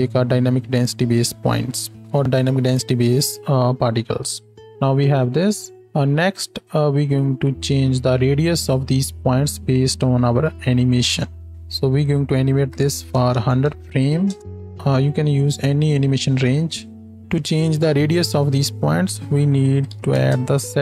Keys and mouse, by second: 2.0 shift+Left, 4.6 space, 5.7-12.0 drag, 5.7 space, 13.3 KP_0.